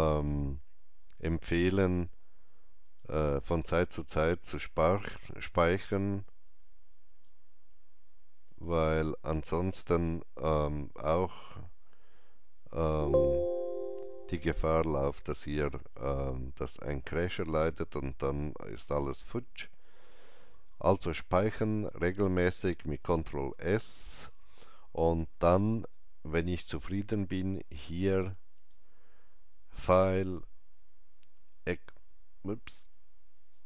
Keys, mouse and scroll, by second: 2.7 alt+Left, 2.7 click, 6.1-10.4 drag, 10.4 click, 22.7 click, 23.2 ctrl+s, 28.4 ctrl+s, 28.4 click, 33.3 ctrl+s, 33.3 click.